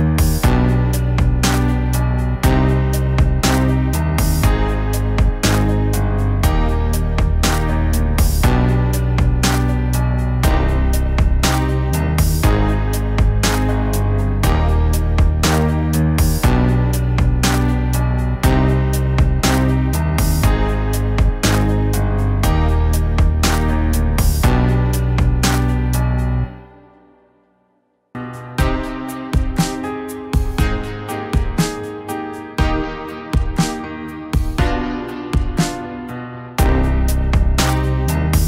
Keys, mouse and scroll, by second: 5.2 middle click, 14.8 middle click, 18.0 middle click, 18.3 middle click, 18.8 middle click, 19.1 middle click, 19.8 middle click, 20.3 middle click, 20.9 middle click, 22.1 middle click, 23.7 middle click, 25.9 middle click, 27.3 middle click, 29.2 middle click, 29.4 middle click, 29.7 middle click, 29.9 middle click, 36.3 middle click, 38.3 middle click.